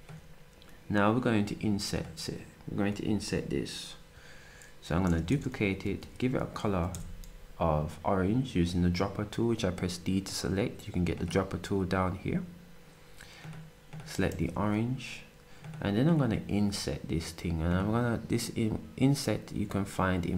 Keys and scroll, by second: 14.3 s.